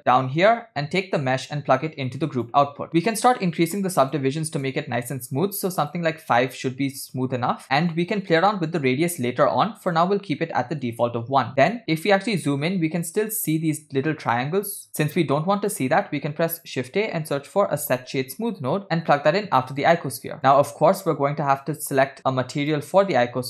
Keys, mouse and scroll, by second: 1.0-2.6 drag, 3.7 click, 4.0 click, 4.6 click, 5.8 click, 7.9-11.0 drag, 11.7 middle click, 11.7 click, 11.9-13.0 scroll up 6, 15.0 shift+a, 20.4 click, 21.6 click, 22.3-22.8 drag, 23.3-23.4 drag.